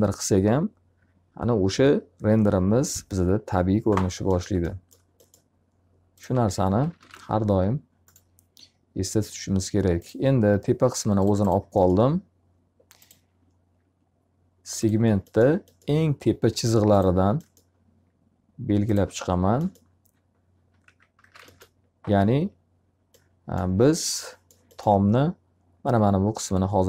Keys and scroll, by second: 6.1-7.6 typing, 20.3 x, 21.1 z, 21.3 alt+a, 21.9 q.